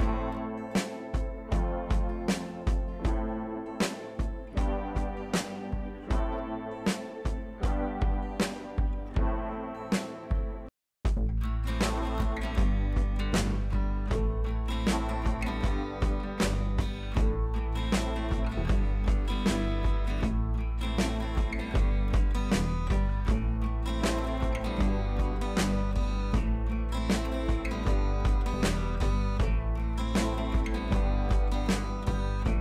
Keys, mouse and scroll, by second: 0.1-0.5 drag, 2.9 ctrl+t, 3.7-5.5 alt+drag, 6.2 ctrl+a, 7.1 click, 8.7 ctrl+d, 9.9 click, 17.3 click, 18.1 click, 18.5 scroll down 1, 18.7 click, 19.5 scroll down 1, 23.9 click, 24.7-25.7 scroll up 1, 26.3-27.4 scroll down 1, 29.4 ctrl+n, 31.2 click.